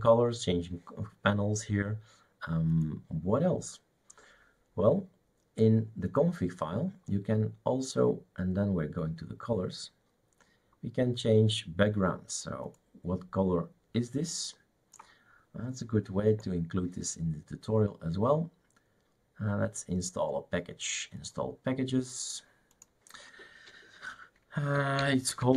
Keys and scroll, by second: 24.5-25.5 typing.